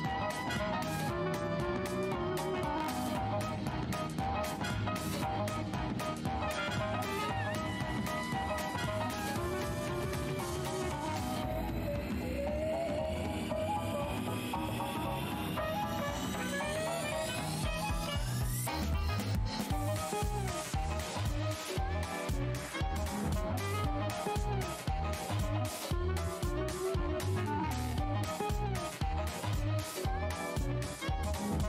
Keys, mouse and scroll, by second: 1.7 click, 3.7 Tab, 4.4 -, 5.3 alt+click, 6.0 alt+scroll down 1, 6.0 e, 6.8 click, 7.7 w, 8.3 alt+click, 13.0 right click, 13.3 click, 14.0-14.3 alt+scroll up 1, 14.5-15.1 scroll down 1, 15.5 ctrl+click, 15.8 scroll, 17.3 click, 18.9-19.2 scroll up 1, 19.2 Delete, 19.8 click, 21.3 Delete, 21.9 click, 23.0 Delete, 23.8 click, 24.4 Delete, 24.9-25.2 scroll down 1, 25.9 space, 29.9 alt+scroll down 1, 30.9 alt+scroll.